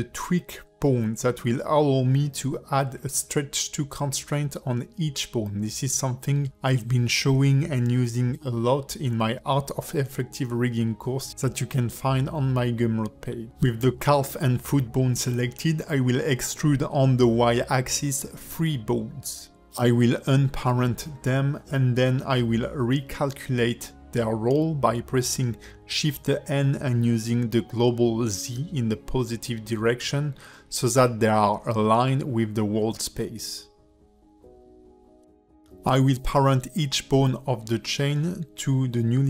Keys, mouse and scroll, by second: 0.1 click, 0.8 Tab, 1.2 click, 2.2 shift+click, 2.9 shift+middle click, 12.2 shift+click, 12.2 shift+middle click, 17.0 e, 19.7 shift+click, 21.2 alt+p, 23.7 click, 24.6 alt+p, 27.2 click, 28.2 alt+p, 30.3 shift+click, 31.2 shift+click, 32.2 shift+n, 35.7 scroll up 1, 36.2 shift+middle click, 36.7 Tab, 37.5 click, 38.3 shift+click.